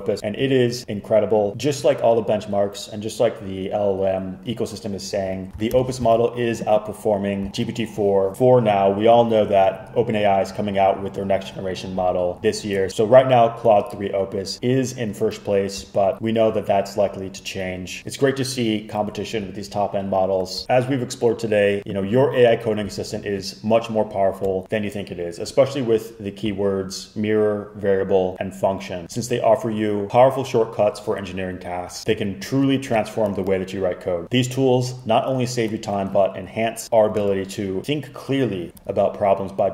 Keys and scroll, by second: 5.8 super+k.